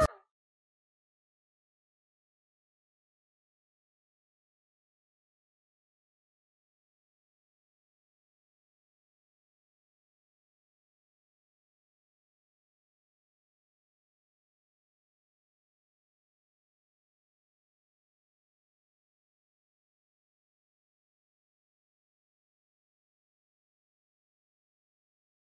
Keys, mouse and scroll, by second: 0.2 c, 1.0 alt+shift+z, 1.3 alt+shift+z, 1.7 alt+shift+z, 2.3 click, 3.7 shift+click, 4.2 click, 4.7 click, 5.1 shift+click, 6.9 click, 7.1 g, 7.5 click, 8.3 alt+r, 8.7 alt+s, 9.5 i, 9.8 click, 10.0 shift+d, 10.7 alt+shift+z, 11.0 space, 12.5 space, 13.0 Left, 13.1 g, 14.0 click, 14.9 click, 15.1 g, 15.5 click, 16.4 shift+e, 17.6 i, 18.0 click, 18.3-19.5 drag, 19.6 shift+e, 20.0 ctrl+middle click, 20.1 click, 20.4 a, 20.7 i, 20.8 click, 21.0 n, 21.2 click, 21.9 click, 22.1 click, 23.0 ctrl+click, 23.5-25.6 typing, 24.4 click, 25.2 click, 25.4 ctrl+middle click.